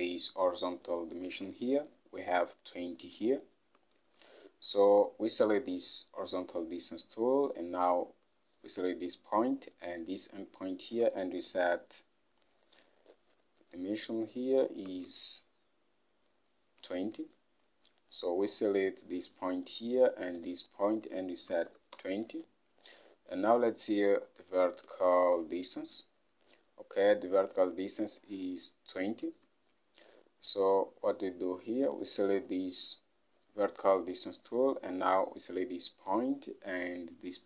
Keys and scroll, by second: 4.1 ctrl+Tab, 15.2 ctrl+Tab, 21.4-22.3 typing, 25.0 ctrl+Tab.